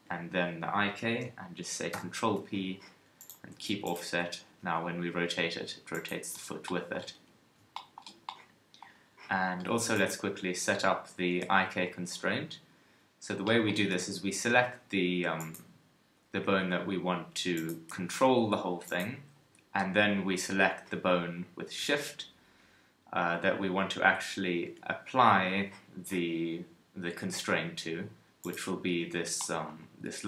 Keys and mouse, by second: 1.9 ctrl+p, 3.5 Tab, 4.0 KP_3, 4.4 r, 7.1 KP_1, 14.5 g, 16.3 g, 17.9 g, 28.4-30.2 middle drag.